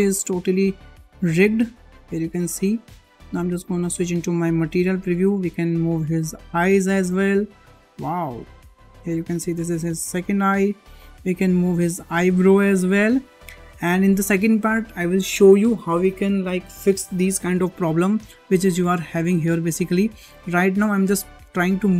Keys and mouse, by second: 2.4 click, 3.5-3.8 shift+middle drag, 4.4 click, 5.8 g, 9.1 click, 9.4 g, 12.1 g, 18.1 g, 20.2-21.1 middle drag, 21.5-21.9 middle drag.